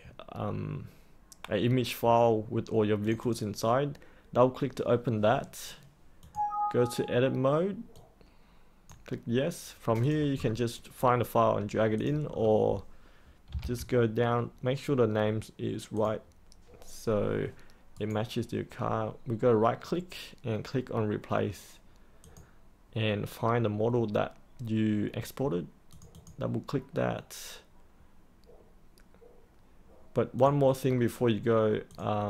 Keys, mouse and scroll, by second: 10.3-11.9 scroll down 1, 11.9 click, 12.3-12.9 scroll down 1, 13.2-14.1 typing, 14.3-15.8 scroll down 1, 15.9 click, 17.9 right click, 22.2 click, 30.9-31.8 scroll down 1, 31.8 click.